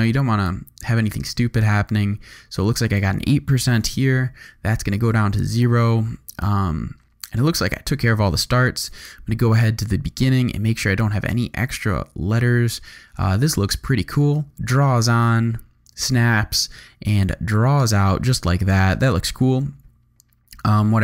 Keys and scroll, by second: 3.7 0, 3.9 Return, 11.3 space, 18.8 space.